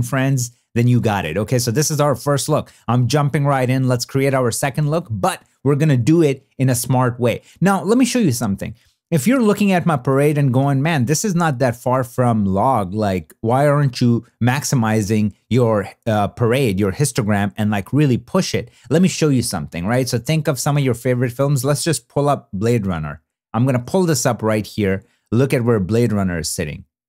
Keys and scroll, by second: 11.2 shift+d, 23.6 super+w.